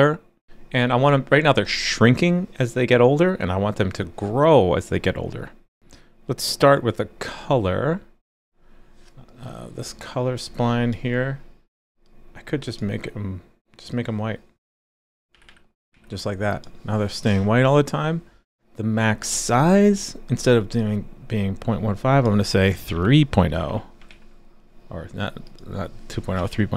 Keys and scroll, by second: 15.9 super+s, 24.1 super+s.